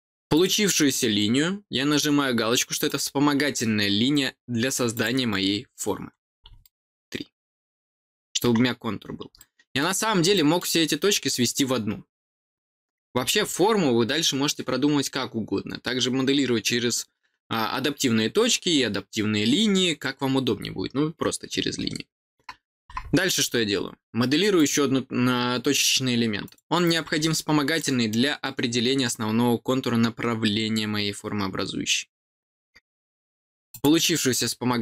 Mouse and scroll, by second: 0.3 click, 2.8 click, 6.6-8.3 middle drag, 9.3 middle click, 10.0 middle click, 10.3 middle click, 24.5 click, 26.4 click, 27.3 middle click, 27.5 middle click, 27.7 middle click, 33.6 click.